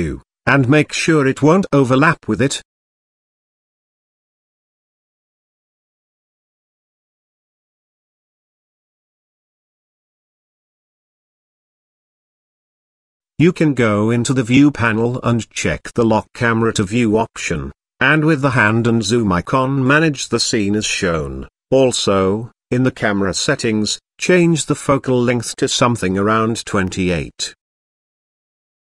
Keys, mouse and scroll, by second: 0.9 z, 3.1-3.5 middle drag, 3.9-4.6 middle drag, 4.8-5.2 shift+middle drag, 5.4-5.9 middle drag, 6.4-7.2 shift+middle drag, 8.1 click, 9.2-10.7 drag, 11.3 KP_0, 14.8 click, 15.1 click, 16.2 click, 18.0-21.6 drag, 23.7-26.4 drag, 27.5-28.9 drag.